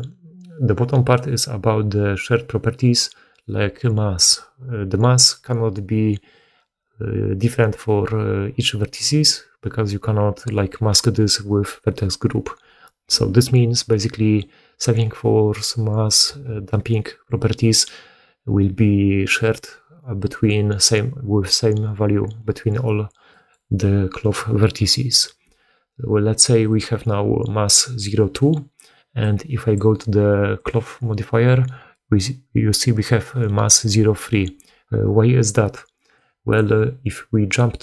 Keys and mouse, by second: 29.1-30.6 drag, 30.6-36.1 middle drag, 36.1-37.8 drag.